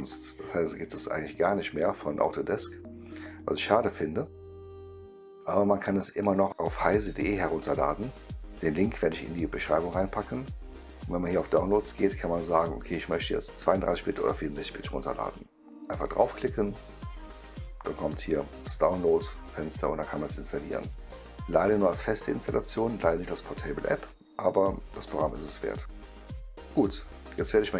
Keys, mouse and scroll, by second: 6.2 click, 11.2 click, 15.9 click, 20.1 click, 24.9 click, 26.2-27.7 right drag.